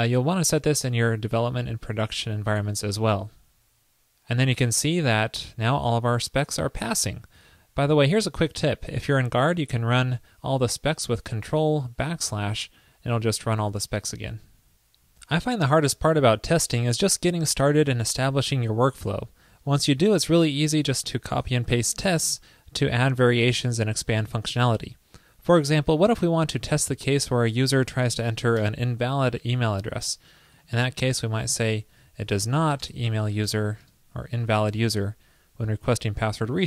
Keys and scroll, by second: 3.2 super+s, 11.7 ctrl+\, 23.6 super+c, 27.4 super+v, 33.2 alt+Right.